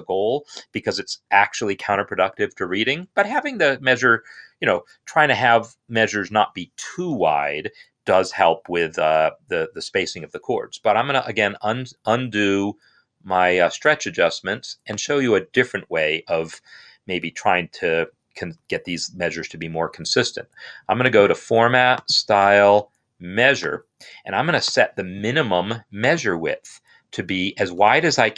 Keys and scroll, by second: 27.2 Up.